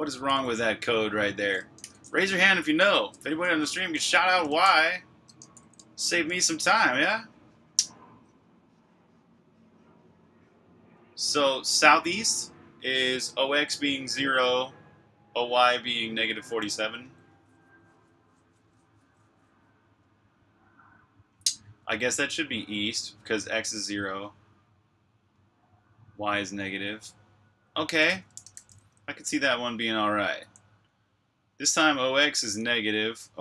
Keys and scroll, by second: 3.3-5.4 typing, 5.3 Escape, 28.0-29.8 typing, 32.3 typing.